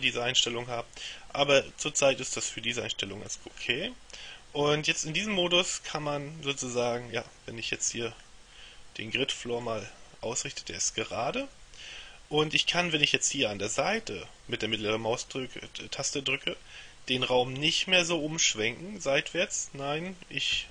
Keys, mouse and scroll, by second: 3.3 click, 5.5-8.4 middle drag, 11.5-13.0 middle drag, 19.6-20.7 middle drag.